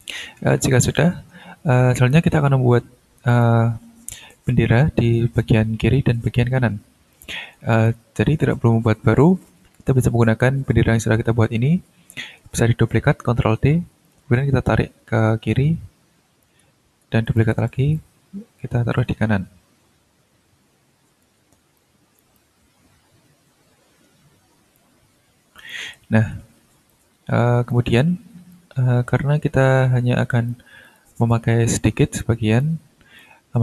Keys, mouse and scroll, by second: 0.3-0.9 ctrl+scroll down 4, 1.1-1.5 ctrl+scroll up 2, 2.0 ctrl+scroll down 2, 3.3 click, 7.1 click, 7.7 click, 9.4 scroll down 2, 13.6 ctrl+d, 14.0-16.6 ctrl+drag, 16.7 ctrl+scroll down 2, 17.2 ctrl+click, 17.7 ctrl+d, 17.9-21.4 ctrl+drag, 21.7-24.9 drag, 25.6 click, 26.1 shift+scroll down 2, 26.9-27.9 ctrl+drag, 27.9 ctrl+scroll up 2, 28.5-30.7 ctrl+drag, 30.8 click, 31.8 click, 33.2-33.6 drag.